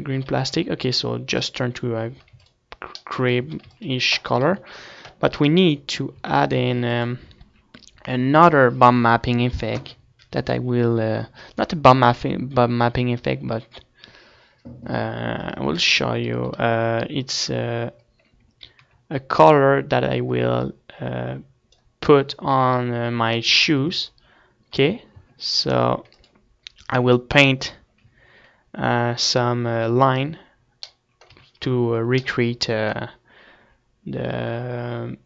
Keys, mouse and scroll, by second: 0.4-2.0 right drag, 0.7 ctrl+s, 2.0-3.4 drag, 2.7 ctrl+s, 3.9 a, 4.1 ctrl+s, 5.1 KP_3, 6.0-7.4 right drag, 6.7 z, 7.4 ctrl+s, 7.4-9.8 middle drag, 16.9 KP_1, 17.9-19.0 middle drag, 19.4 z, 21.4-22.8 drag, 22.8 middle click, 23.3 z, 24.3-28.2 middle drag, 25.7 Tab, 26.0 Tab, 28.2 click, 29.0-35.2 middle drag, 32.0 z.